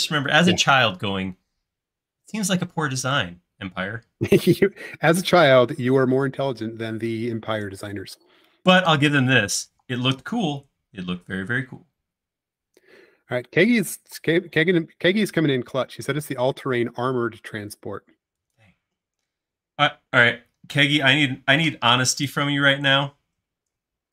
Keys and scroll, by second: 5.8-7.1 typing, 7.7 Return, 9.8 m, 22.7 q.